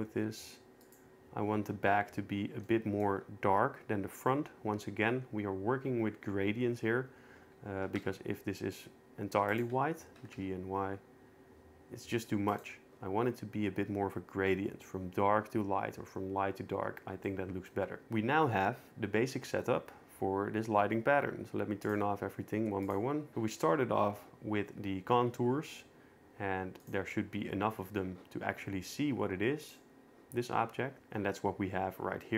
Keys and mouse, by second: 2.7 shift+middle drag, 7.8 g, 8.0 x, 10.2 g, 10.3 y, 12.5 right click, 17.3 shift+middle click, 21.9-23.1 drag, 26.8 click, 29.6 click.